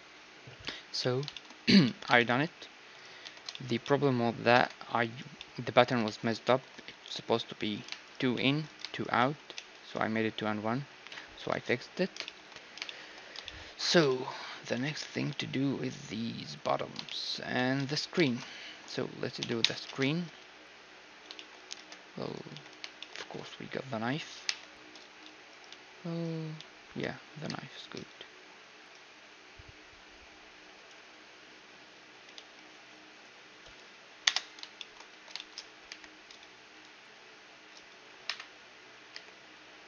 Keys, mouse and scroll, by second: 0.6-2.6 middle drag, 2.6-3.8 right drag, 2.8 Tab, 4.1 ctrl+Tab, 4.8 middle click, 9.1 Tab, 10.7 KP_1, 11.1 ctrl+s, 14.9 z, 17.5 z, 18.3 z, 19.0 z, 19.2 Tab, 21.9 ctrl+Tab, 22.2 z, 22.4-24.6 middle drag, 24.1 a, 24.1 k, 25.2-27.1 right drag, 25.6 z, 26.2 z, 27.1 k, 34.4-37.2 middle drag, 34.7 a, 35.5 k, 38.2 k, 38.7 k.